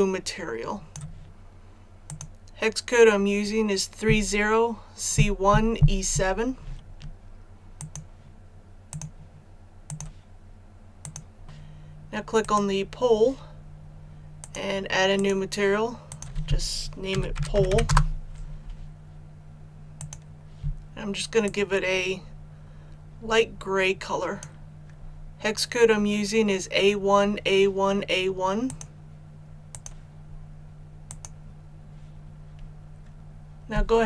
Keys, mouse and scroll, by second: 12.4-13.5 right drag, 14.4 click, 17.1-17.7 typing, 17.9 Return, 20.0-23.5 drag, 24.5 click.